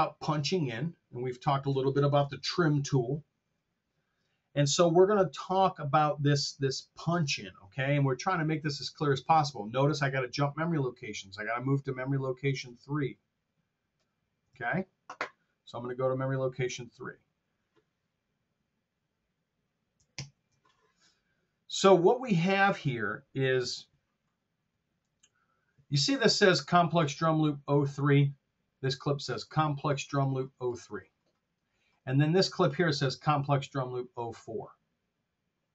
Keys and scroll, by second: 14.5 super+Tab, 20.1 ctrl+super+Down, 24.3 r.